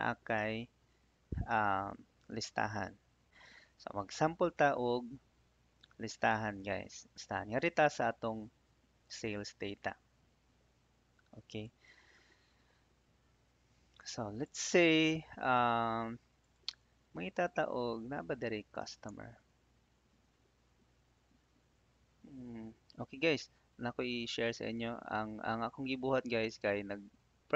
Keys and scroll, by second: 16.7 Tab, 19.1 shift+Tab.